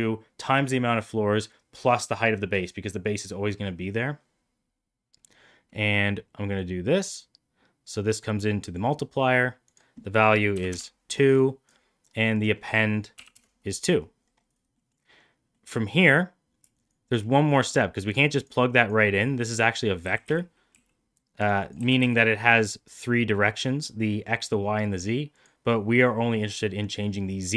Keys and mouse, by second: 6.6-8.7 drag, 9.6-11.1 drag, 12.4-13.5 drag, 14.8 middle click, 15.6 middle click, 20.0 g, 21.7 g.